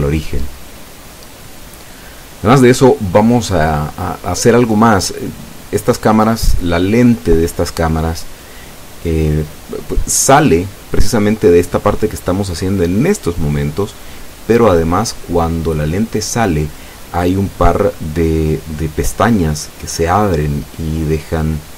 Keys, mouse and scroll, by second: 4.4 click, 5.2 e, 5.5 y, 9.3 click, 10.0 e, 10.3 s, 15.8 click, 16.4 e, 16.7 y, 20.8 click, 21.7 e.